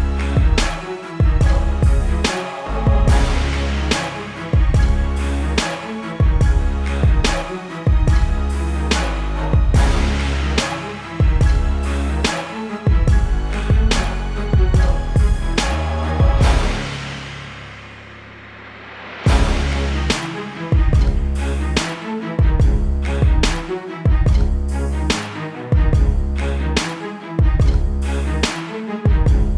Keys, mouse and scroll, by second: 1.1 click, 4.4 KP_Enter, 5.5 click, 8.8 click, 9.7 ctrl+t, 11.3 alt+click, 14.3 click, 15.7 click, 16.6 KP_Enter, 19.2 click, 24.1 click, 24.9 KP_Enter, 25.2 click, 28.1 t, 28.5 click, 29.1 KP_Enter.